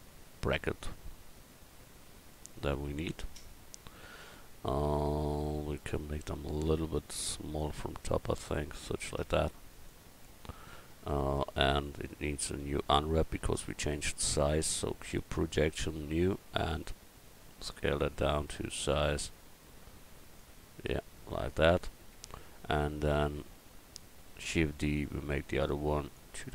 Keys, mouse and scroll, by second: 4.2 a, 7.6-9.8 drag, 7.6-9.8 right drag, 11.3 Tab, 11.9 Tab, 12.3 a, 12.6 a, 13.9 u, 16.7 s, 20.6 Tab, 22.1 Tab, 24.6 shift+d, 25.6-26.5 drag.